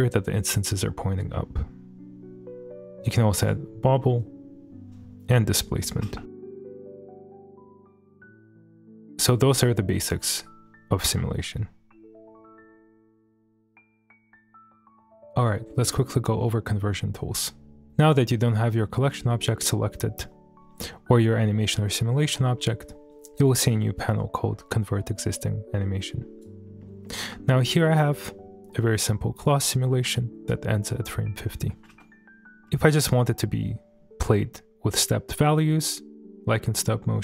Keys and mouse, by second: 3.0 click, 3.0 space, 4.2-5.9 drag, 6.0 space, 6.6 click, 6.6 space, 8.3 space, 9.1 space, 11.1 space, 16.1 shift+middle drag, 16.4-16.9 middle drag, 24.1 click, 25.8 click, 26.8 middle click, 27.2 space, 29.9 space, 31.4 click, 31.9 space.